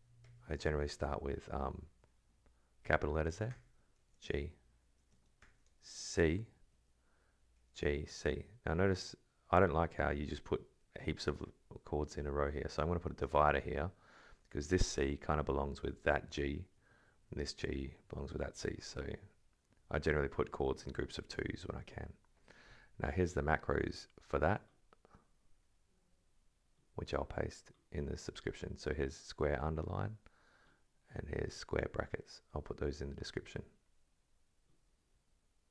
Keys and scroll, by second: 0.2 shift+b, 0.9 Left, 1.6 Right, 1.8 Left, 3.5 Escape, 4.0 shift+g, 4.3 alt+Right, 5.1 space, 5.4 ctrl+[, 6.4 shift+c, 6.7 shift+space, 7.7 shift+g, 7.8 shift+space, 8.0 shift+c, 9.7 Left, 10.5 Right, 11.3 Left, 12.1 Right, 13.2 shift+space, 14.3 Left, 15.0 Right, 15.2 Left, 15.8 alt+Left, 16.6 alt+Right, 18.5 alt+Left, 19.7 Right, 20.9 Left, 21.4 Right.